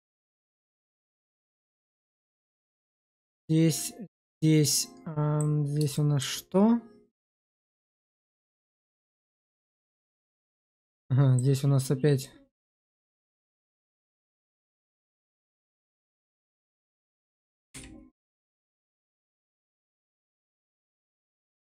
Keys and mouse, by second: 0.1 middle click, 0.7 shift+middle click, 1.2 middle click, 2.5 shift+middle click, 3.1-5.3 middle drag, 5.9 shift+middle click, 7.2-8.8 middle drag, 9.2 click, 9.7 middle click, 10.0 shift+middle click, 10.5 middle click, 12.1 middle click, 13.2 shift+middle click, 14.5 click, 15.9 shift+z, 16.5 click, 17.6 1, 18.3 click, 18.9 shift+middle click, 19.2 middle click, 20.5 shift+z, 21.0 shift+middle click.